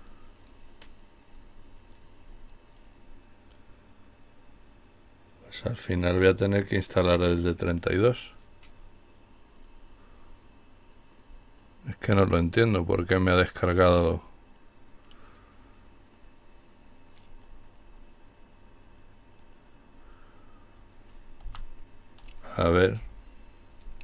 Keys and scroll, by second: 20.7 Up.